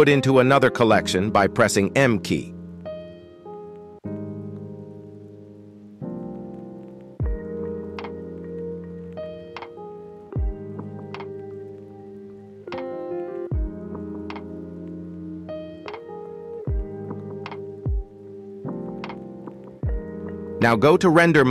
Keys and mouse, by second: 1.0 KP_1, 2.8 m, 6.9 Return, 8.4 alt+h, 9.9 click, 11.6 shift+middle click, 12.5 shift+middle click, 13.4 ctrl+s, 14.0 shift+middle click, 14.5 z, 16.6-17.9 drag, 18.1 click, 18.7 middle click, 19.9 shift+middle drag, 20.5 click, 21.3 shift+middle click.